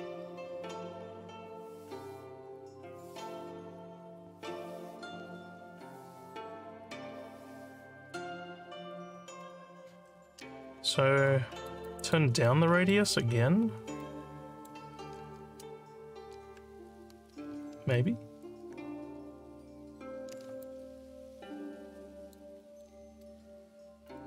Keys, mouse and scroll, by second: 10.9 alt+scroll down 2, 11.0 alt+scroll up 1, 11.3 alt+middle click, 11.8 alt+click, 12.4 alt+middle click, 13.6 scroll down 1, 14.0 alt+middle click, 20.6-22.3 alt+drag, 22.6 alt+middle click, 24.0 click.